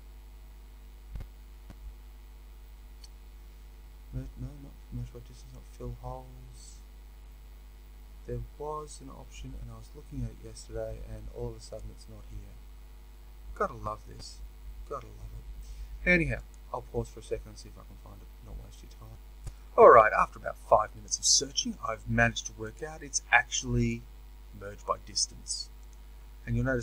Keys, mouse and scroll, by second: 19.1 ctrl+z, 25.8-26.8 drag.